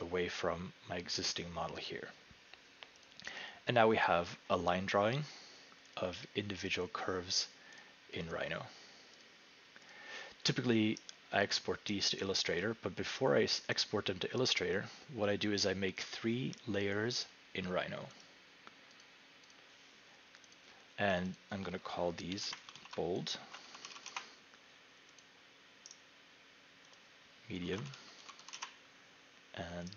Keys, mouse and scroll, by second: 3.1 click, 4.3-5.9 scroll, 5.9 scroll, 6.0 click, 6.7 click, 8.5 click, 9.2 click, 10.0 click, 10.5-11.0 scroll, 12.0 right click, 12.2-12.8 scroll, 18.2 click, 19.0 click, 19.5 click, 20.5 click, 21.2 click, 21.4 click, 22.3 End, 22.7 Home, 23.2-24.5 typing, 25.2 click, 25.8 typing, 26.0 right click, 27.0 click, 27.4-28.9 typing.